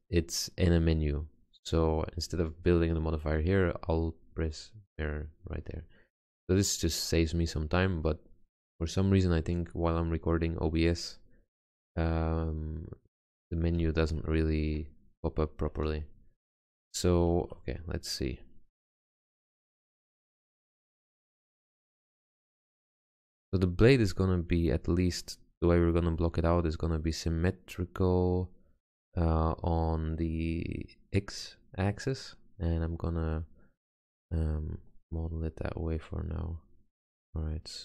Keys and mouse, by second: 5.3-7.8 middle drag, 10.0-11.6 middle drag, 12.0-12.6 middle drag, 12.8-13.5 middle drag, 14.5 middle drag, 16.0 ctrl+z, 17.4 Tab, 19.3 g, 20.2 middle click, 21.7 click, 23.8-26.2 middle drag, 26.8 middle click, 33.5-34.7 middle drag, 35.8 Tab.